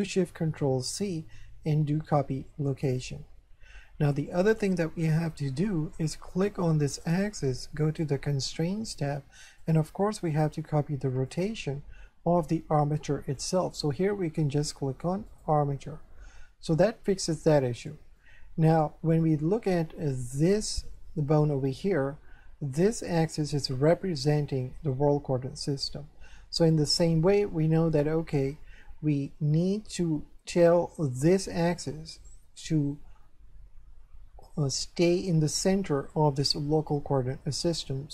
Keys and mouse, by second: 0.9 ctrl+shift+c, 2.7 click, 6.3 right click, 7.8 click, 9.6 click, 11.3 click, 13.4 click, 15.3 click, 18.2 shift+middle click, 19.2 middle click, 22.8 right click.